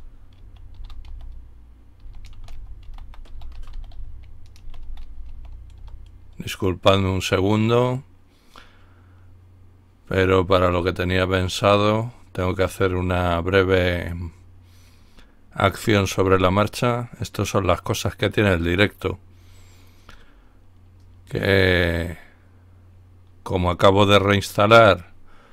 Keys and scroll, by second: 0.0-5.8 typing.